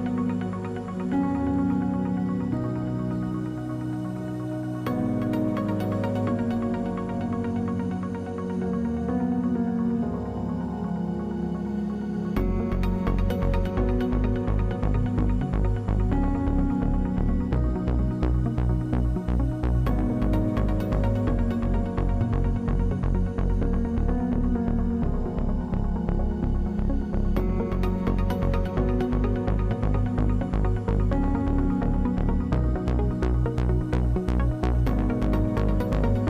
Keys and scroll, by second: 10.1 space, 11.1 space, 21.0 space, 25.5 space.